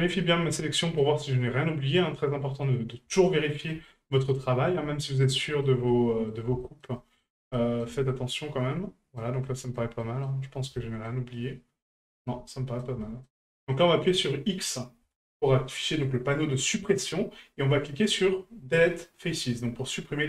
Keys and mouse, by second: 0.6 middle click, 1.3-2.9 middle drag, 3.3-3.7 shift+middle drag, 3.9-5.2 middle drag, 5.4 shift+middle drag, 5.9-6.3 middle drag, 6.6 shift+middle drag, 7.0 middle drag, 7.5 shift+middle drag, 8.1-9.2 middle drag, 9.4-9.8 shift+middle drag, 10.0 middle click, 10.8-11.1 shift+middle drag, 11.3-12.2 shift+middle drag, 12.5-12.8 middle drag, 13.0 shift+middle drag, 13.5 middle drag.